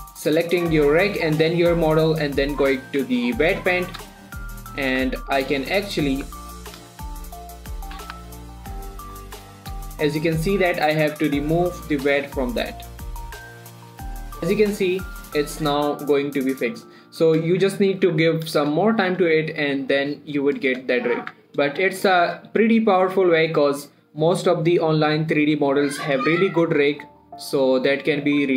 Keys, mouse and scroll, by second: 1.9 Tab, 3.4 click, 4.2 alt+a, 4.7 shift+click, 5.6 shift+click, 7.5 click, 9.7-11.4 middle drag, 11.4 click, 13.5 alt+a, 13.5 click, 13.8 middle click, 13.8 click, 14.3 r, 14.6 right click, 14.9 click, 15.2 r, 15.8 right click, 16.1 scroll down 1, 18.2 middle click, 18.4 Tab, 18.7 middle click, 19.1 shift+middle click, 19.7 click, 20.0 middle click, 20.6 click, 20.8 middle click, 21.3 shift+middle click, 21.6 scroll up 1, 21.7 Tab, 22.0 middle click, 22.5 click, 22.8 shift+middle click, 23.1-23.4 scroll up 1, 23.4 g, 24.0 right click, 24.3 middle click.